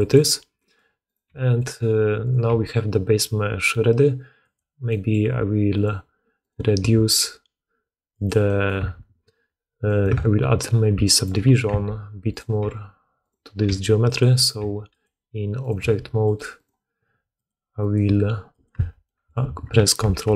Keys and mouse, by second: 0.0 click, 0.9 click, 1.2 g, 2.1 click, 2.4 g, 5.0 middle click, 5.6 click, 5.8 middle click, 6.3 click, 6.4-8.0 middle drag, 6.7 s, 8.7 Tab, 8.7-10.8 drag, 10.9 shift+click, 11.2 click, 11.6 Tab, 12.2 click, 12.5 g, 13.5 g, 14.2 click, 14.5 g, 15.5 click, 15.7 g, 16.4 click, 16.9 s, 17.7 click, 17.9 s, 18.6 Tab, 19.9 ctrl+1.